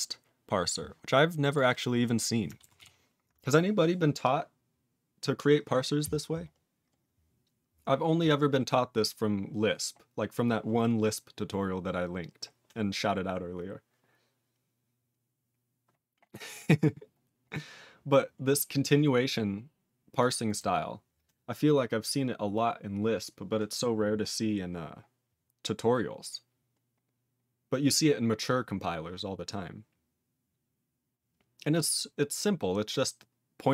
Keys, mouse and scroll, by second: 0.6 scroll down 1, 1.4 click, 1.5 click, 2.7 ctrl+s, 6.4-8.1 scroll down 9, 8.7 scroll down 3, 9.3 scroll down 4, 10.2-10.7 scroll down 1, 10.8-11.9 scroll down 4, 12.0-12.6 scroll down 3, 13.5 scroll down 2, 14.8 scroll down 2, 15.5 scroll down 1, 17.6 scroll down 2, 18.8 click, 20.1 click, 20.5 click, 20.5 click, 21.0 click, 24.2-25.4 scroll up 7, 26.7-27.4 scroll up 3, 27.4-28.0 scroll up 3, 28.7-29.3 scroll up 5, 29.4-29.7 scroll up 5, 31.0-32.1 scroll down 18, 32.2 scroll up 10.